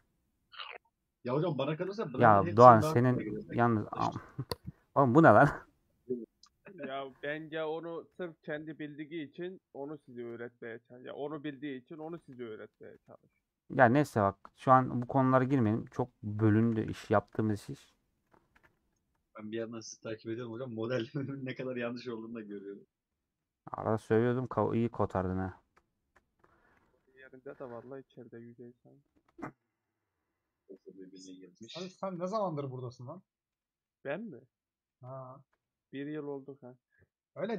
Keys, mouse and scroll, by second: 0.0 scroll up 2, 0.1-1.0 scroll down 3, 0.5 middle click, 1.0-1.7 scroll up 5, 1.9 2, 2.2 alt+click, 2.6 scroll down 3, 2.8-4.6 middle drag, 4.6 alt+z, 5.1-8.0 middle drag, 8.0 g, 9.0-12.3 middle drag, 12.3 1, 12.4-15.2 drag, 16.3 middle click, 16.7 a, 18.2 middle click, 18.6 a, 19.4-19.7 scroll down 3, 19.7-21.3 middle drag, 21.3-21.7 scroll down 4, 21.7-23.0 middle drag, 23.0 scroll up 1, 23.3-25.3 middle drag, 25.3 scroll up 1, 25.6 middle click, 26.5 click, 27.0 KP_Decimal, 27.5 middle click, 27.7-28.1 scroll down 2, 28.1 alt+z, 28.3-29.7 middle drag, 29.7 shift+click, 30.6 shift+x, 31.1 scroll down 2, 31.4-32.4 middle drag, 32.4 scroll down 1, 33.1 middle click, 33.6 alt+z, 34.2-37.0 middle drag, 37.0 click.